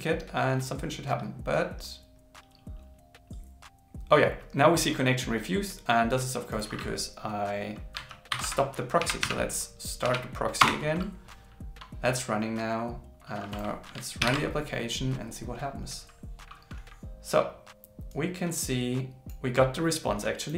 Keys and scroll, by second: 14.2 ctrl+shift+r.